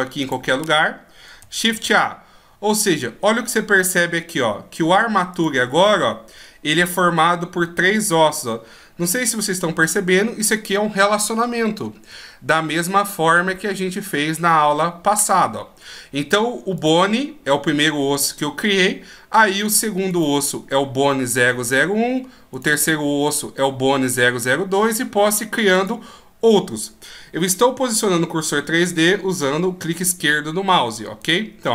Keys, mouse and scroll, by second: 0.1 click, 1.6 shift+a, 5.2 click, 15.4-16.6 scroll down 2, 16.6 click, 19.9 right click, 22.4 right click, 25.6 click.